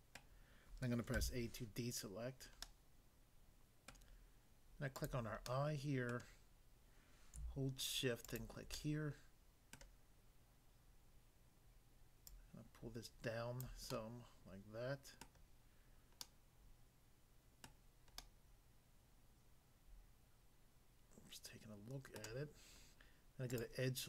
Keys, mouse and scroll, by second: 0.1 middle click, 1.1 a, 2.6 middle click, 3.9 middle click, 5.0 click, 5.4 middle click, 6.1 middle click, 8.3 shift+click, 8.8 middle click, 9.8 middle click, 12.2 click, 13.7 click, 13.9 middle click, 15.2 middle click, 16.3 middle click, 17.6 middle click, 18.2 middle click, 22.2 middle click, 23.5 click.